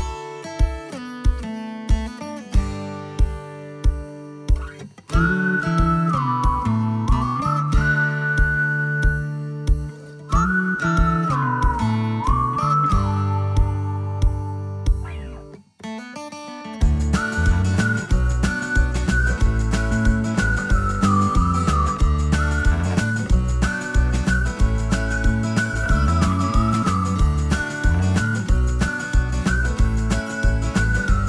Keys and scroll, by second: 21.8 space.